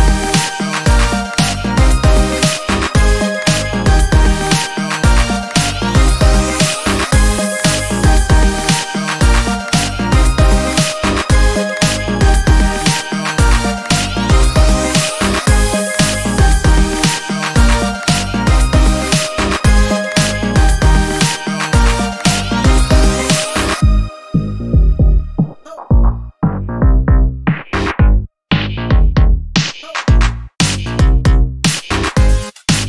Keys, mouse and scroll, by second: 1.5 click, 2.6 Up, 10.7 Up, 12.3 click, 13.8 ctrl+a, 14.9 click, 17.7 middle click, 18.5 middle click, 19.1-19.9 ctrl+scroll up 4, 20.8-21.8 ctrl+drag, 22.5 Delete, 24.1-25.2 drag, 25.7-27.3 shift+drag, 27.8 shift+click, 29.4 click, 30.4-32.8 drag.